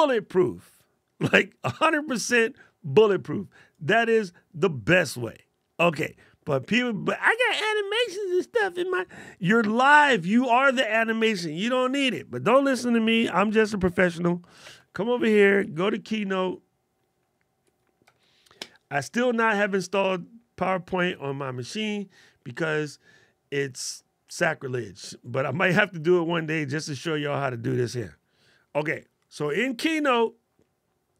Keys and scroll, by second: 14.4 super+space.